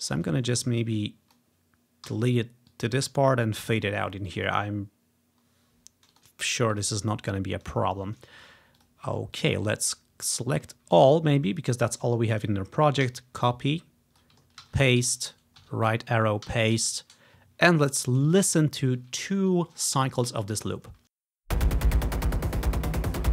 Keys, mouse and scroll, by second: 0.6 typing, 2.2 Delete, 2.8 click, 3.6 click, 6.2-7.6 drag, 8.9 click, 9.4 click, 9.6 click, 11.0 ctrl+a, 13.2 ctrl+c, 13.5 click, 13.9 click, 14.7 ctrl+v, 15.7 Tab, 16.6 ctrl+v, 18.4 ctrl+click, 18.7 ctrl+scroll down 1, 21.1 space.